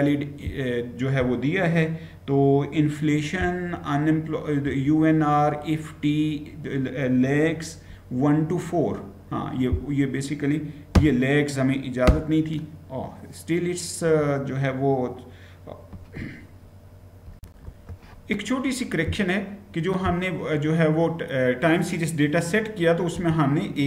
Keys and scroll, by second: 10.8 /, 11.9 Return, 17.1 ctrl+v, 17.1 Return, 17.1 shift+F9, 22.9-23.8 typing.